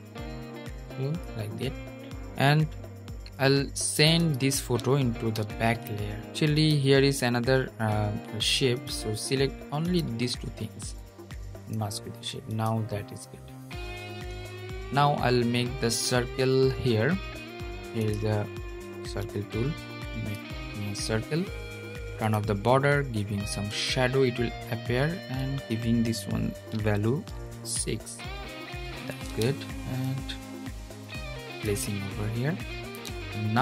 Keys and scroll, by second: 5.1 super+{, 5.7 super+{.